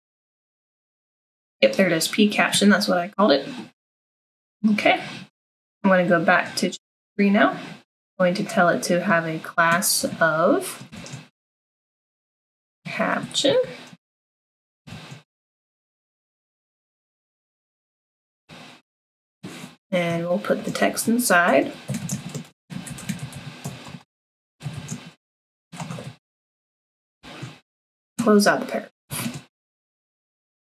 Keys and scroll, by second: 10.0 =, 10.9 ", 12.0-15.3 typing, 17.9-18.9 typing, 20.3-29.1 typing.